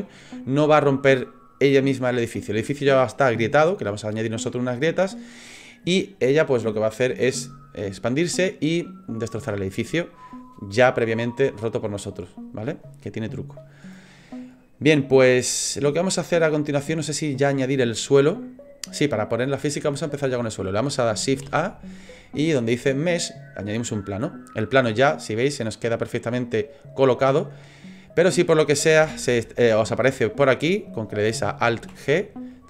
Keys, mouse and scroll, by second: 15.6 shift+middle click, 21.4 shift+a, 25.7 middle click, 29.7 middle click, 31.8 alt+g.